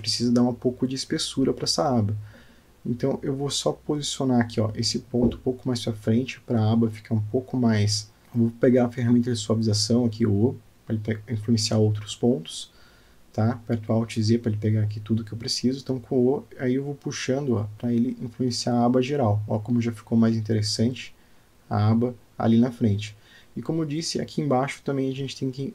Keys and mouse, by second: 0.0-0.3 alt+shift+middle drag, 1.3-1.7 shift+middle drag, 2.2 Tab, 2.8 click, 5.8 g, 8.2 o, 8.2 g, 13.5 shift+click, 15.3 alt+z, 16.0 click, 16.7 shift+click, 17.8 g, 20.9 Tab, 22.5-25.2 middle drag, 25.6 Tab.